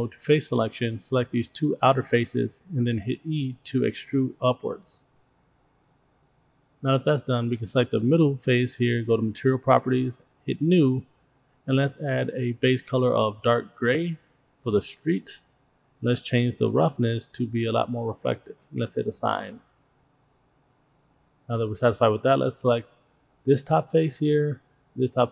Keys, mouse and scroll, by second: 0.6 click, 1.4 shift+click, 3.0 e, 7.0 click, 9.2 click, 11.2 click, 12.4 click, 16.1 scroll down 2, 16.4 click, 17.8-18.9 scroll up 1, 19.5 click, 20.8 click, 22.5 click, 24.5 shift+click.